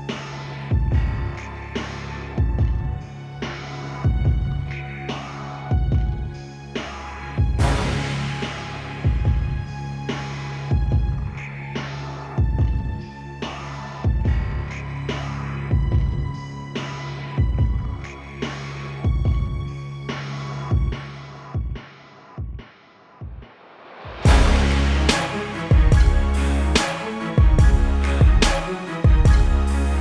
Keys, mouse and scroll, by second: 1.1 click, 2.7-3.1 typing, 3.3 click, 7.5 right click, 9.3 click, 11.5 =, 11.9 space, 12.1 click, 12.4 space, 13.3 click, 16.1 b, 17.3 KP_Enter, 17.5 b, 18.5 click, 23.5 [, 23.7 [, 24.0 [, 24.1 click, 26.6 click, 29.4 ], 29.6 ], 29.9 click.